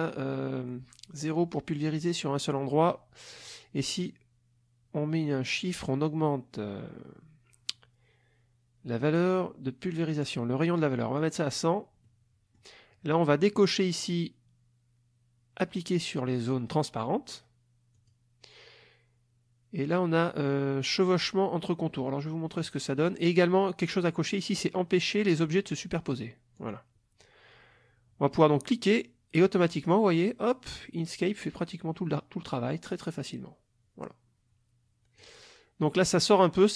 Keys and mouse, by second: 10.1-11.4 drag, 12.0 middle click, 12.1 click, 18.0 click, 22.0 middle click, 26.6 click, 28.7-35.4 drag.